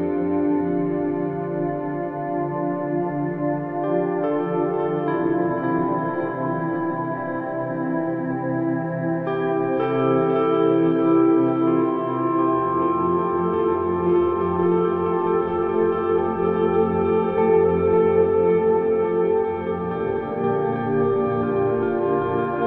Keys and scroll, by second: 4.7 space, 13.9 space.